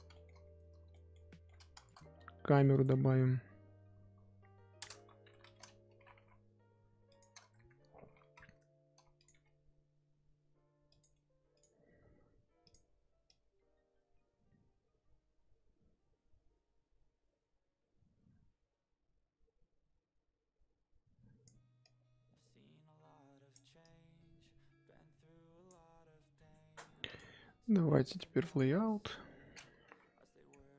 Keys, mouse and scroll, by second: 0.3-0.9 scroll up 3, 0.9-1.8 middle drag, 1.8 shift+a, 3.2 scroll up 1, 3.3-4.8 scroll down 2, 4.8 alt+KP_0, 5.9 g, 7.9 r, 9.3 g, 11.6 click, 13.2 click, 26.0-27.1 scroll up 2, 27.1 click, 28.4 click, 28.8 KP_0, 29.4-29.9 scroll down 1, 29.9 z.